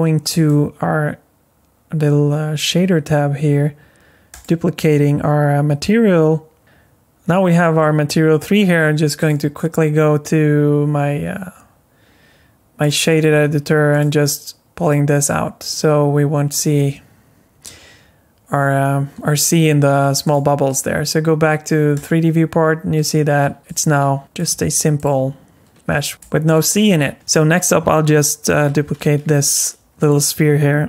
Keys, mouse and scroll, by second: 0.3 click, 4.3 click, 9.2 click, 13.9 click, 14.8 click, 20.2 click, 23.6-27.1 typing, 26.1 scroll down 1, 26.2 shift+middle click, 27.1 ctrl+z, 27.1 click, 29.3 g.